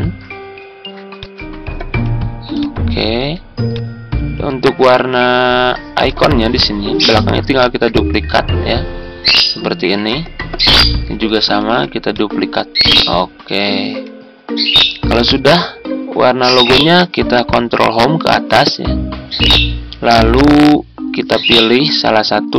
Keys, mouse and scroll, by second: 7.5 ctrl+d, 11.5 ctrl+d, 18.0 Home.